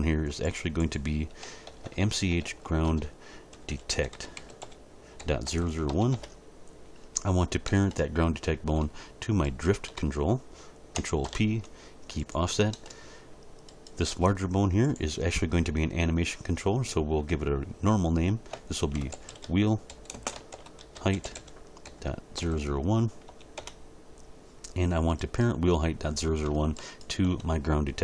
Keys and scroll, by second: 1.7 BackSpace, 3.5-5.9 typing, 6.1 Return, 11.2 ctrl+p, 18.9-23.3 typing, 23.6 Return.